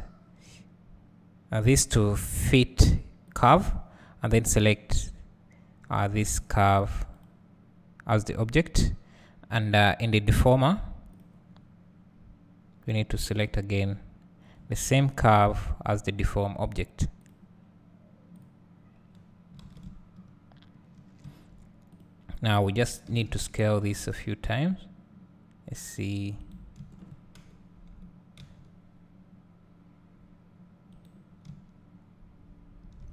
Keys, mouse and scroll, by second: 3.3-4.5 drag, 8.4-9.4 scroll down 1, 11.3 click, 14.5 scroll up 1, 15.4 `, 17.4 click, 19.1-19.6 scroll down 1, 19.6 alt+a, 19.9 `, 22.0 click, 23.2 s, 26.5 right click, 26.9 `, 27.4 KP_7, 28.4 s, 31.0 right click, 31.5 `.